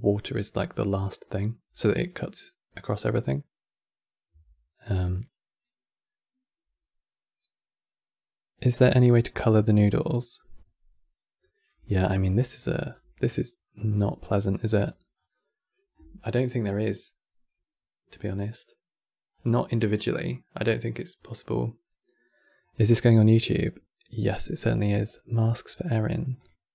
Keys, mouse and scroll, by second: 0.0 click, 1.1-4.3 drag, 10.8 scroll down 2, 11.1 middle click, 11.6-11.9 ctrl+scroll up 9, 12.2 middle click, 12.6-13.1 scroll up 19, 13.3-14.5 middle drag, 14.5-15.0 scroll down 8, 15.0-15.6 middle drag, 15.6-17.6 scroll down 2, 19.0-21.8 scroll down 4.